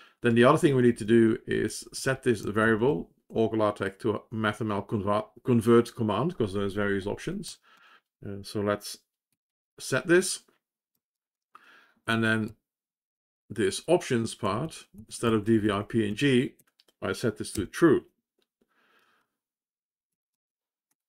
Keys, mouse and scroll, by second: 19.2 ctrl+s.